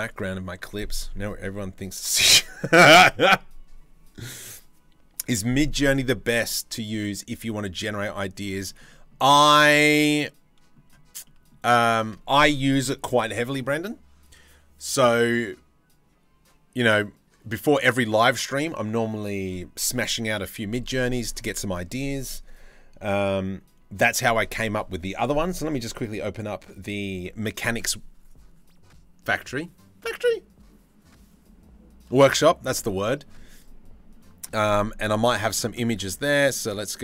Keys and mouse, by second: 7.6-8.0 middle drag, 8.3 shift+middle drag, 8.5 middle click, 9.3-10.3 middle drag, 10.8 shift+middle drag.